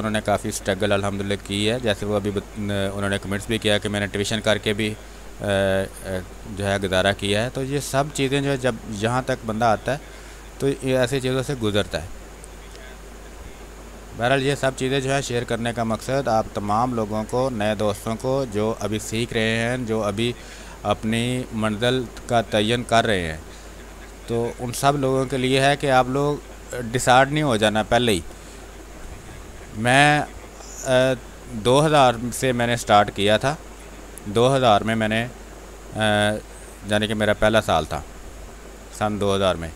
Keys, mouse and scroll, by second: 3.0 click, 3.5 space, 3.7 click, 4.0 space, 4.8-7.3 drag, 7.3 click, 8.5 click, 9.4-10.8 drag, 10.8 click, 11.5 space, 11.6 click, 12.0 space, 12.9-14.3 drag, 14.3 space, 14.4 click, 14.7 space, 14.9 space, 15.3-19.7 drag, 18.7 click, 19.6 click, 19.7 space, 20.2 space, 21.2 click, 23.3 space, 24.1-26.9 drag, 26.9 space, 27.1 click, 28.0 space, 28.4 r, 28.6 click, 29.5 b, 29.9 space, 30.1 click, 30.4 space, 32.0-34.1 drag, 34.1 space, 34.2 click, 34.6 space, 35.3-37.4 drag, 37.4 space, 37.7 click, 37.9 space, 38.7-39.7 drag.